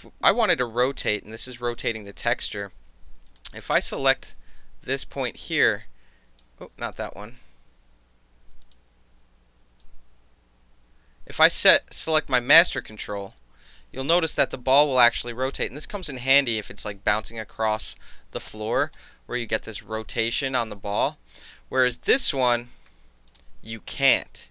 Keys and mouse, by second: 1.8 click, 3.3 click, 3.9 click, 4.5 e, 5.5-6.4 drag, 6.6 ctrl+z, 7.0 click, 8.7 click, 9.9-16.9 drag, 16.9-19.6 middle drag, 19.6-21.6 drag, 21.6-23.1 ctrl+middle drag, 21.8 ctrl+z, 22.3 ctrl+z, 22.9 ctrl+z, 23.3 click.